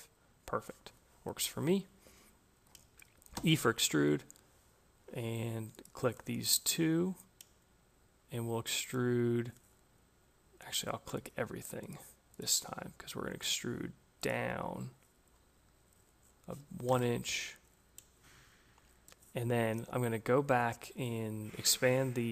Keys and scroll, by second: 3.2 e, 16.3 Return.